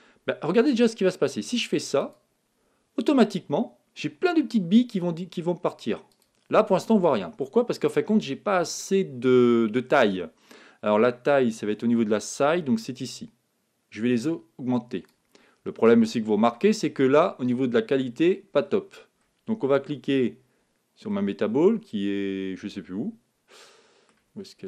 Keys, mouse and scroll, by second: 1.9-4.0 drag, 6.1-8.0 drag, 12.8-14.6 drag, 18.9-19.9 middle drag, 19.9 scroll down 1, 20.1-23.0 middle drag, 24.4-24.6 middle drag.